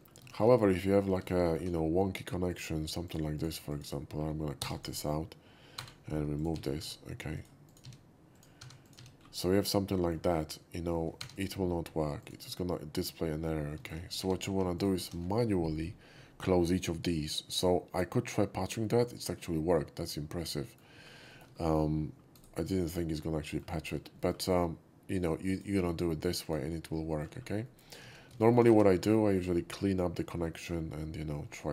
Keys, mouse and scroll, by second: 0.3 middle drag, 0.5 scroll up 1, 0.8 middle click, 1.2 middle click, 1.5 middle click, 1.7 scroll up 1, 2.5 alt+click, 3.0 alt+click, 3.3 alt+click, 3.7 alt+click, 3.8 alt+right click, 4.1 alt+middle click, 4.7 click, 4.8 right click, 5.8-9.5 typing, 6.3 click, 7.3 click, 7.7 click, 8.3 click, 8.8 click, 9.2 scroll down 1, 9.5-10.1 middle drag, 11.1 4, 11.3 click, 12.2 click, 13.8 shift+middle click, 14.0 scroll up 1, 14.2 2, 14.7 click, 17.5 alt+click, 18.8-20.8 middle drag, 21.3 shift+middle click, 22.3 shift+right click, 22.9-23.6 shift+middle drag, 23.7 shift+middle click, 24.2 shift+middle click, 25.5 alt+click, 26.4 alt+click, 27.1 shift+middle click, 27.4 scroll down 1, 27.6 shift+middle click, 28.2 ctrl+z, 28.4 shift+middle click, 28.7 ctrl+z, 29.0 alt+middle click, 29.2 alt+middle click, 30.5 shift+middle click, 31.5 scroll down 1.